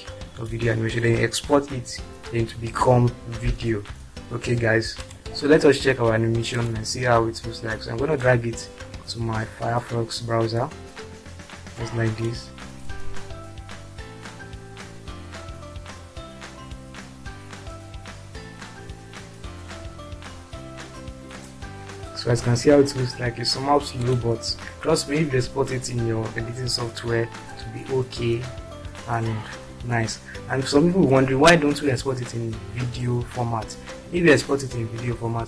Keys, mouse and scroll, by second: 10.8-11.2 drag.